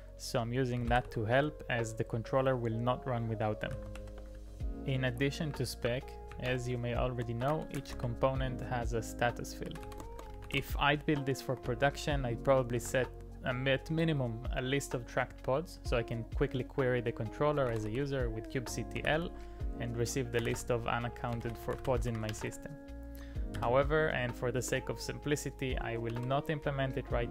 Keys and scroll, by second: 0.6-1.6 typing, 3.5-11.5 typing, 12.7 typing, 17.1-22.9 typing, 23.6 Up, 24.6 Return, 26.1 ctrl+d.